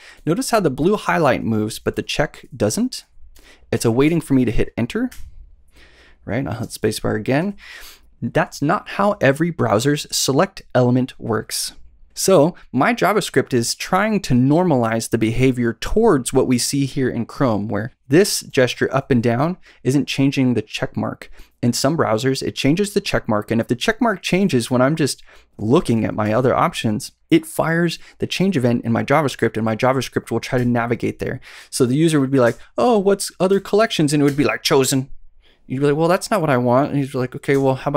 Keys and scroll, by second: 0.1 Up, 0.4 Down, 1.0 Up, 2.4 Down, 2.6 Up, 3.3 Down, 3.7 Up, 4.0 Down, 5.0 Up, 5.1 Return, 6.5 space, 7.3 Down, 18.1 Down, 18.4 Up, 19.0 Up, 20.1 Down, 24.3 Up, 25.4 Up, 25.7 Down, 26.2 Up, 30.5 Return, 32.4 space, 33.4 Down, 34.2 Return, 37.4 space.